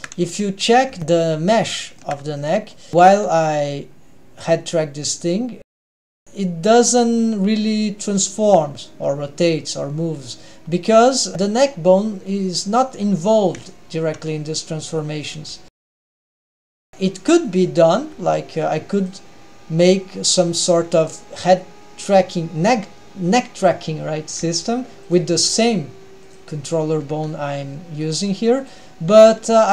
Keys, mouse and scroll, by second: 0.2-1.0 scroll up 2, 1.0 shift+middle click, 1.0-1.8 scroll up 3, 1.8-4.3 shift+middle drag, 4.3 click, 4.3 g, 14.0-16.0 scroll down 1, 16.0 click, 16.0 shift+middle click, 16.0 scroll down 1, 18.5 g, 19.2 g, 25.9 g, 26.1 g, 27.6 g.